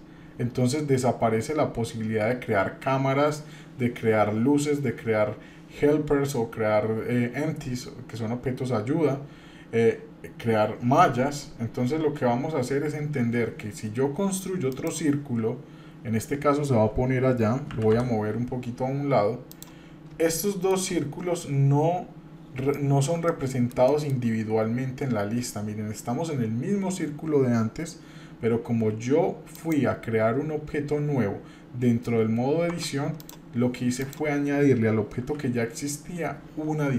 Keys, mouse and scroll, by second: 15.3-15.6 scroll down 2, 17.7 scroll down 1, 17.7 g, 19.8 scroll up 2, 20.3 shift+middle click, 21.0-22.3 scroll up 1, 22.7 shift+middle click, 23.3 middle click, 23.8 shift+middle click, 29.5-31.4 drag, 32.7 Tab, 33.2 click, 34.0 click, 35.2 g.